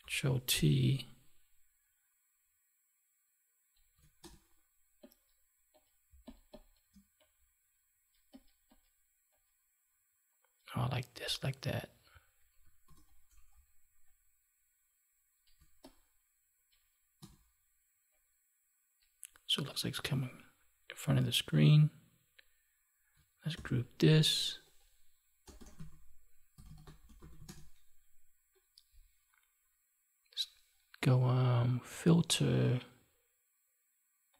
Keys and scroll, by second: 6.0 space, 23.5 ctrl+g.